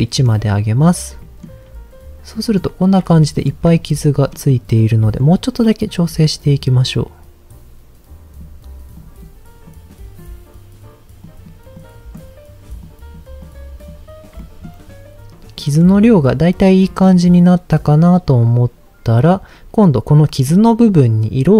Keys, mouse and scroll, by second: 1.2 middle click, 2.3 middle click, 3.2 shift+middle click, 4.3 middle click, 5.0 middle click, 5.2-5.9 scroll up 3, 6.0 click, 6.8-8.4 drag, 8.9 click, 9.7 click, 11.2 click, 11.7 click, 12.7 click, 13.4 click, 14.3 middle click, 15.5 middle click, 16.9 middle click, 20.4 middle click.